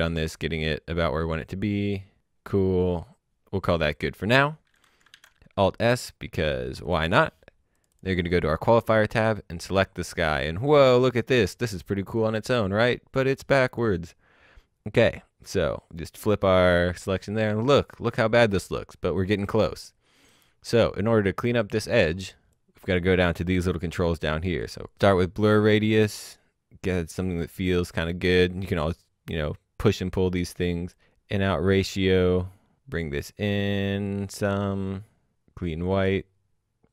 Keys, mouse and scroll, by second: 1.2-2.1 scroll up 1, 2.9-4.0 scroll down 1, 4.7 click, 5.0 s, 5.6 click, 11.8 click, 15.6 click, 17.1-18.2 scroll up 1, 18.2 middle click, 20.8 click, 24.6 click, 25.3 click, 30.9 click.